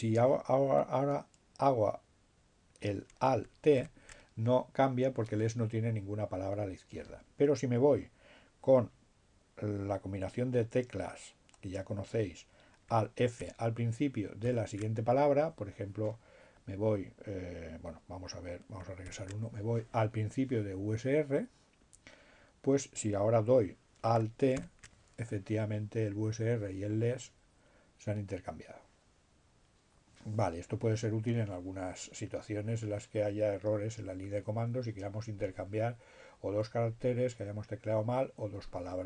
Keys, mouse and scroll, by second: 2.3 alt+t, 11.0 alt+f, 14.4 f, 19.1 alt+b, 23.6 alt+t.